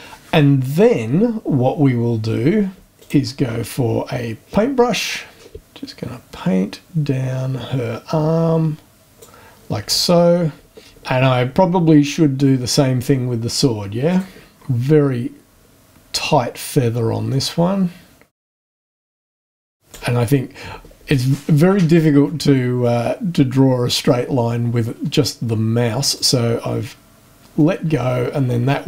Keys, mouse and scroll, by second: 3.0 click, 4.3-4.7 scroll down 2, 5.4 scroll down 2, 5.5-9.4 drag, 12.0-12.3 scroll up 1, 14.0 click, 14.5-15.9 scroll down 7, 17.3-20.2 drag, 22.8-24.2 drag, 25.2-26.4 drag, 27.6-28.8 drag.